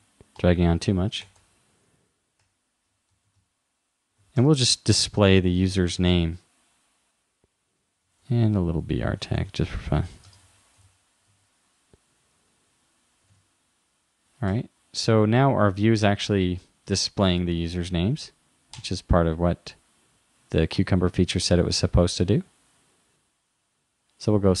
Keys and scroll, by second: 4.9 super+s, 9.4 shift+,, 10.9 shift+., 11.3 super+s, 13.3 super+Tab.